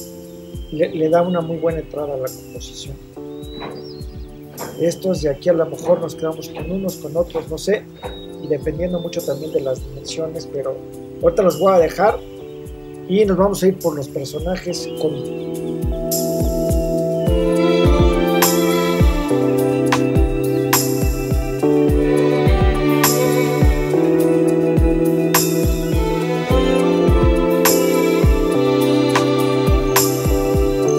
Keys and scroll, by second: 19.8 super+c, 21.9 super+v, 29.6 l, 30.3 super+c.